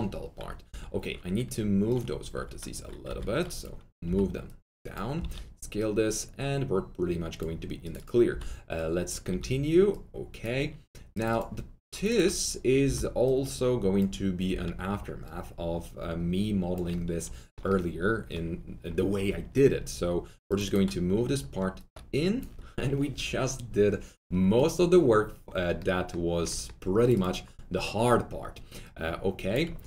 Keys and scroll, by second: 0.6 2, 2.3-4.0 typing, 5.1 w, 8.2-9.7 typing, 12.8 ctrl+r, 14.4 w.